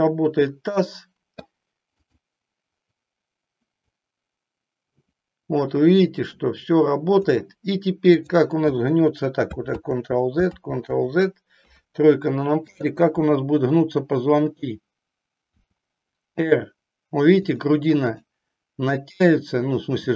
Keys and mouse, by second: 2.2 click, 3.8-7.3 drag, 8.0 click, 9.8 ctrl+z, 10.5 ctrl+z, 11.5 KP_3, 15.5 r, 18.0 click, 19.9 r.